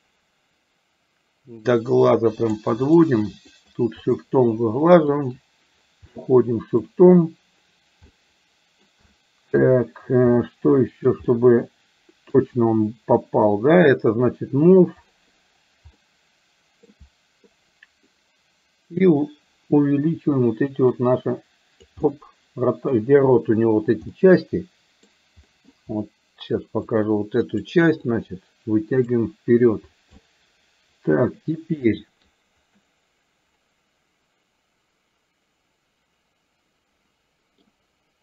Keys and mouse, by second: 1.6-2.6 drag, 2.9 click, 3.6 shift+click, 4.0 shift+click, 5.0 shift+click, 6.1 middle click, 8.1 middle click, 9.1 shift+middle click, 10.4 shift+middle click, 11.3-12.4 middle drag, 16.0 middle click, 21.0 click, 22.0-23.0 middle drag, 24.1-25.1 middle drag, 25.5 middle click, 26.9 click, 28.0-29.1 drag, 30.3-31.6 middle drag, 32.0 middle click, 32.8-37.6 middle drag.